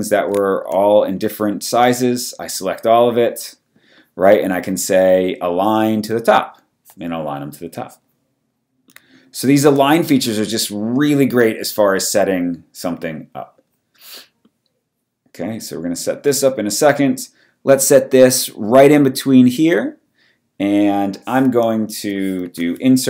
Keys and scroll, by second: 22.4 super+b.